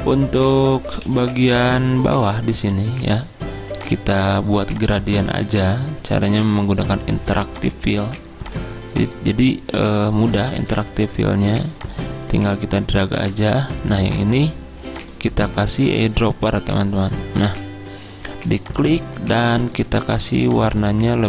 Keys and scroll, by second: 1.0 z, 10.6 ctrl+z.